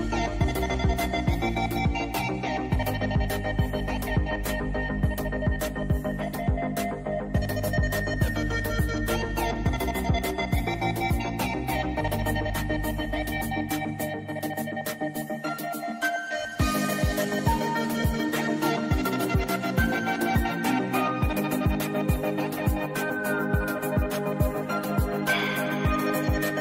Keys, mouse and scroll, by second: 3.3 v, 4.0-4.8 click, 6.9 ctrl+2, 7.7 click, 12.8 i, 13.3-15.6 drag, 17.0 v, 17.3 click, 18.7-19.3 drag, 20.3 ctrl+2, 20.6 click, 22.6 click, 24.3 ctrl+z, 24.8 click.